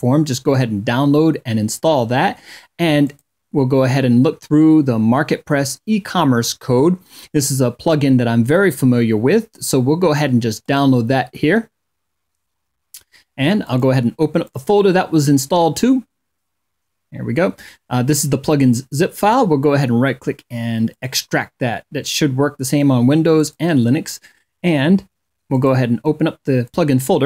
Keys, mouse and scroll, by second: 2.2 click, 9.8 click, 12.7 click, 13.6 click, 18.3 right click, 20.0 click, 22.5 click, 24.6 click, 25.8 click.